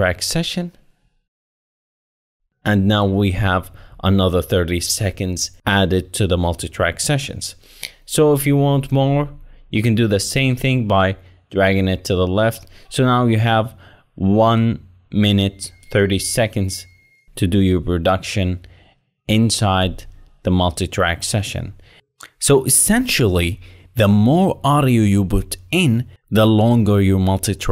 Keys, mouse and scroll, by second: 12.4 Right.